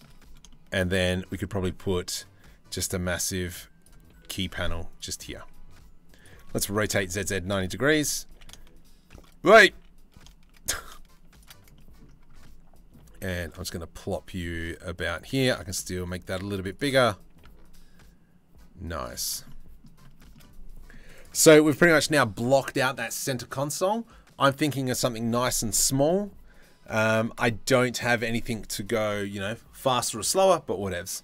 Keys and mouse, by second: 3.8 s, 4.8 g, 6.4 r, 9.3 s, 12.0 shift+middle click, 12.7 g, 14.8 g, 14.9 s, 16.4 s, 16.9 g, 18.7 g, 19.1-19.4 middle drag, 19.7 shift+middle drag, 20.0-20.5 drag, 20.5-31.2 middle drag.